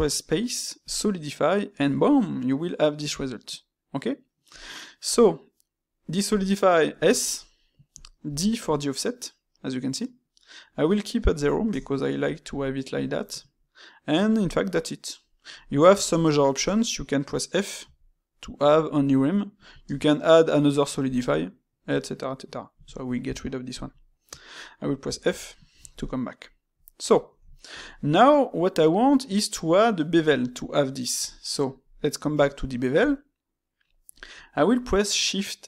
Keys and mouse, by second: 4.9-7.9 middle drag, 15.5-19.7 shift+middle drag, 23.2-30.4 middle drag, 31.4-34.4 middle drag.